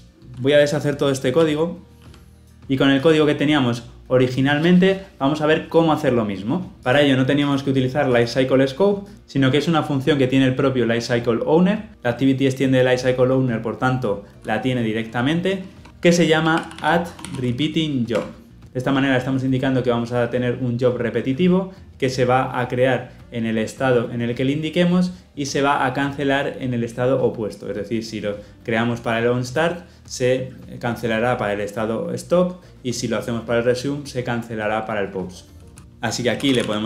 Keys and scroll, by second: 1.3 ctrl+z.